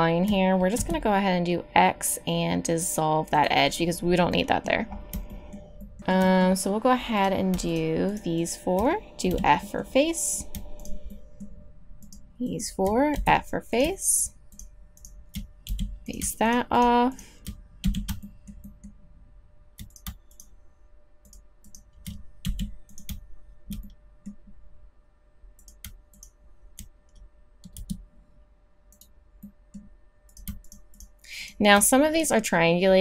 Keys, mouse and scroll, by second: 0.7 x, 9.3 f, 13.1 f, 15.7 f, 17.8 f, 22.4 f, 27.7 x, 30.3 click.